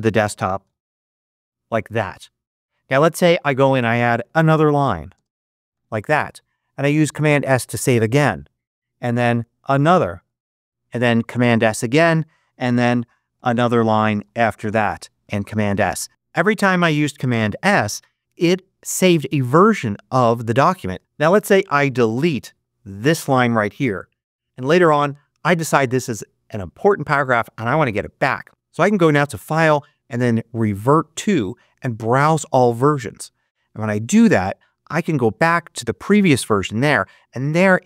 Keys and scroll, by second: 0.3-1.2 typing, 3.5 Return, 4.0-6.1 typing, 7.0 super+Return, 7.2 super+s, 9.1-10.5 typing, 10.9 super+., 11.1 super+s, 11.9 super+Return, 12.9 shift+Return, 13.0-15.2 typing, 15.4 super+s, 23.7 BackSpace.